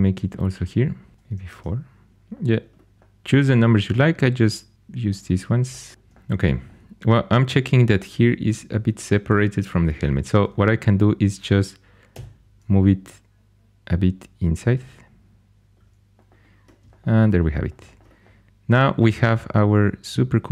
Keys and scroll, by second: 1.1 4, 1.4 Tab, 5.9 4, 12.1 g.